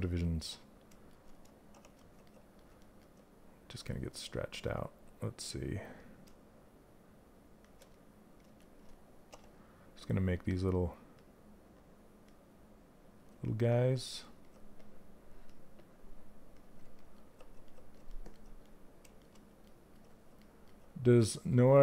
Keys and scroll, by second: 1.2 shift+d, 8.8 w.